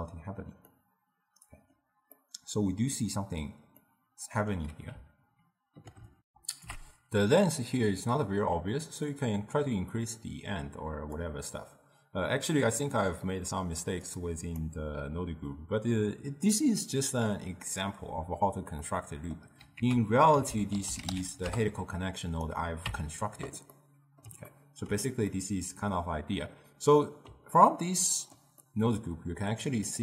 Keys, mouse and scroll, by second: 6.3 ctrl+alt+shift+q, 9.0-12.0 drag, 12.4-14.1 middle drag, 14.1 click, 18.8-19.8 middle drag, 19.8 ctrl+a, 23.1 Tab, 23.8-30.0 middle drag.